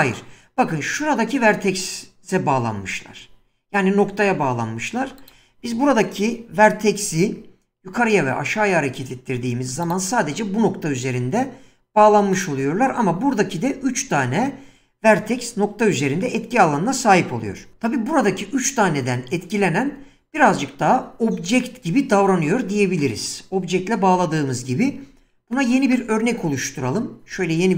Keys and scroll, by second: 6.6 g, 7.1 z, 27.3 Tab.